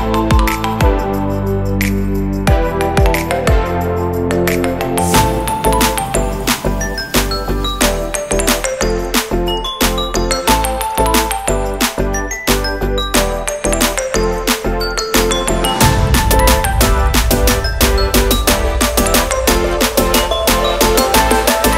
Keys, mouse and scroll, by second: 0.9 shift+middle click, 1.2 middle click, 5.0-6.4 scroll up 8, 5.5 middle click, 6.5 shift+click, 11.0 shift+middle click, 11.5 middle click, 11.8 ctrl+middle click, 12.1 middle click, 14.7 click, 15.6 click, 16.3 middle click, 18.3 click.